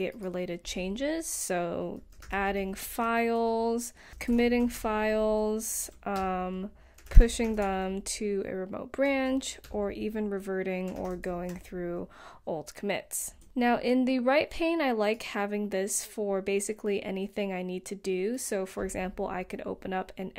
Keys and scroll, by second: 1.3-2.5 typing, 3.7 super+a, 4.1-5.0 typing, 6.3-8.3 typing, 9.9-11.8 typing, 13.5 BackSpace, 17.3-18.1 typing, 19.6-20.3 typing.